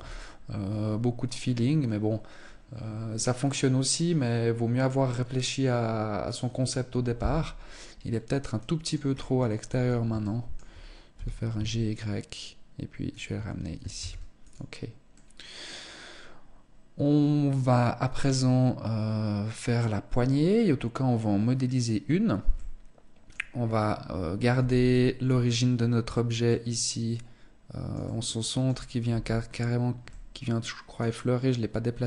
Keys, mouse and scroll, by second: 7.5 middle click, 8.5-8.9 scroll up 8, 9.1 Tab, 9.7 shift+middle click, 10.5 g, 12.6 click, 12.7 Tab, 13.4 ctrl+s, 14.5 middle click, 20.0-21.1 scroll down 1, 21.1-21.9 scroll down 2, 21.9 middle click, 23.0-24.0 scroll up 5, 24.0 z, 24.3 middle click, 25.9 middle click, 27.5 middle click, 28.5 z, 28.9-29.4 scroll up 3, 29.5 middle click.